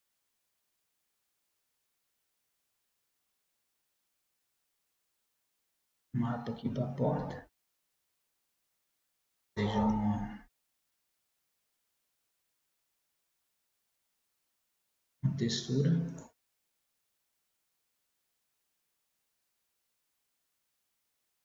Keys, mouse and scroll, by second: 1.2 scroll up 1, 1.5-4.2 drag, 7.6-9.9 middle drag, 9.9 Tab, 11.4 a, 11.7 a, 13.2-15.1 drag, 16.2-19.0 drag, 18.5 middle click, 19.0 middle click, 19.5-21.1 drag, 21.3 click.